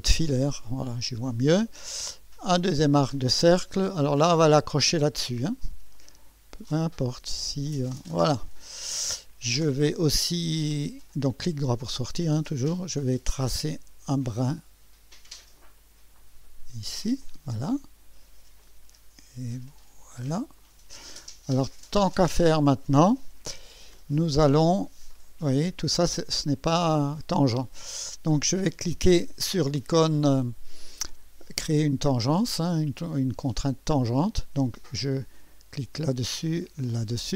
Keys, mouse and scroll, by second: 0.2 2, 2.5 click, 5.5 click, 6.7 click, 8.0 click, 8.7 right click, 11.5 right click, 11.8 typing, 13.0 click, 13.4 click, 15.5 click, 17.2 click, 18.6 click, 20.6 click, 21.6 right click, 24.3-27.9 drag, 28.9 right click, 33.9 click, 35.7 click, 36.9 click.